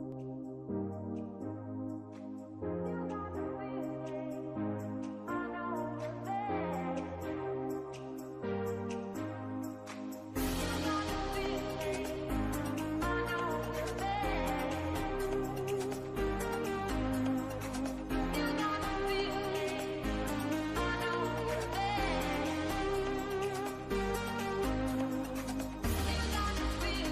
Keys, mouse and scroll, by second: 1.1-4.0 drag, 4.0-5.4 middle drag, 5.4 Tab, 6.8-8.1 scroll up 2, 9.5-10.9 drag, 13.0 scroll down 1, 13.1 click, 17.0-17.4 scroll down 1, 17.5-18.6 shift+middle drag, 18.6 w, 20.0-24.8 drag, 26.7-27.1 drag.